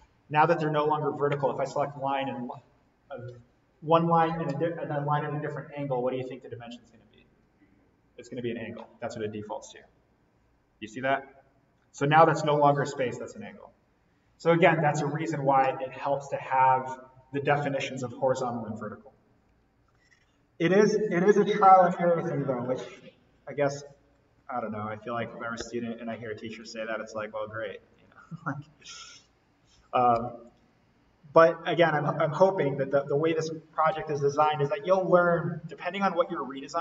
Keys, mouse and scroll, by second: 9.6 click, 19.4 Escape, 21.6 Escape, 22.7 ctrl+z, 25.6 d, 26.5 click, 30.1 Escape, 32.4 click, 32.9 Delete, 33.8 d, 34.9 click.